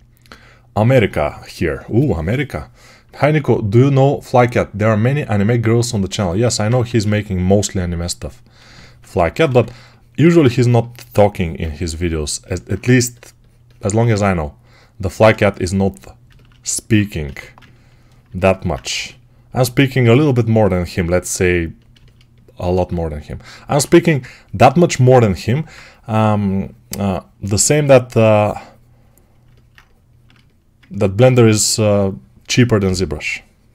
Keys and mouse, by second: 6.6 1, 9.3 2, 13.7 1, 17.1 1, 18.8 g, 23.7 2, 31.2 2.